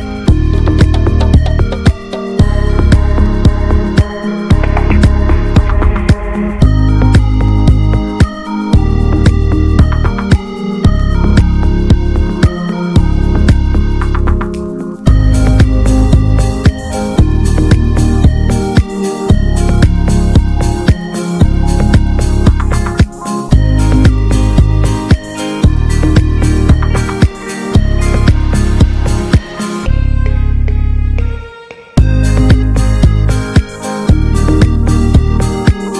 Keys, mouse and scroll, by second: 0.0 ctrl+s, 0.6 scroll down 1, 0.7-1.3 shift+middle drag, 1.3 click, 1.6 Tab, 1.7 a, 2.0 alt+middle click, 2.3 alt+middle click, 2.7 ctrl+s, 3.1 click, 6.6 scroll down 1, 6.9 Tab, 7.0 drag, 7.2-8.7 middle drag, 8.7 scroll up 1, 8.9 ctrl+s, 9.2 shift+middle drag, 9.4 scroll up 1, 9.6 ctrl+s, 10.0 middle click, 10.4 shift+a, 13.1 scroll down 2, 13.3-14.2 shift+middle drag, 14.7 scroll up 2, 15.0-15.5 shift+middle drag, 15.5 r, 16.7 alt+middle click, 17.2-17.6 right drag, 17.6 scroll up 1, 17.9 s, 19.0 click, 19.8 shift+middle click, 20.0 scroll up 2, 20.3 shift+middle click, 20.8 shift+middle drag, 21.0 shift+scroll up 1, 21.2 s, 21.9 click, 23.2 s, 24.3 click, 25.2-25.6 middle drag, 25.6 scroll down 2, 25.8 shift+middle click, 26.7 click, 27.2-28.2 drag, 29.8 scroll down 1, 30.0 ctrl+a, 30.5 Tab, 30.8 middle click, 31.2 3, 31.4 click, 31.6-32.2 middle drag, 32.2 click, 34.0 Tab, 34.2 click, 34.3 scroll down 1, 34.5 middle click, 35.2 click, 35.3-35.8 scroll down 2, 35.5 shift+middle click, 35.8-35.9 middle drag.